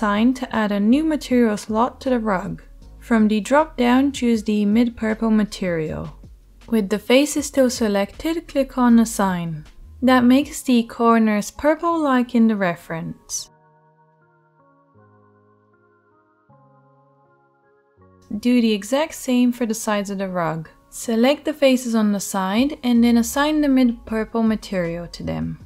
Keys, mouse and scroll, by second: 10.3 2, 11.2 right click, 11.3 middle click, 11.4-16.0 right drag, 12.1 g, 16.0 middle click, 16.1-24.4 right drag, 22.6 3, 24.4 middle click, 24.6 right click, 25.5-25.6 drag.